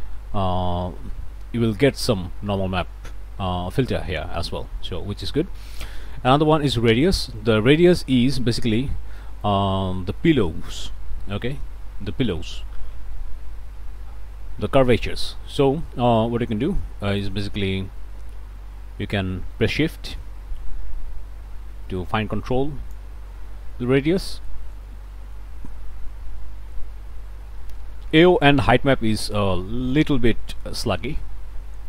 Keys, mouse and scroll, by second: 1.3-1.6 scroll up 1, 4.4-5.1 scroll down 1, 5.2 click, 5.9 click, 7.2-7.7 scroll up 2, 7.9 scroll down 1, 8.6-9.1 scroll up 1, 9.2 click, 10.2 click, 14.2-15.4 drag, 17.2-23.1 drag, 29.3-31.8 shift+drag.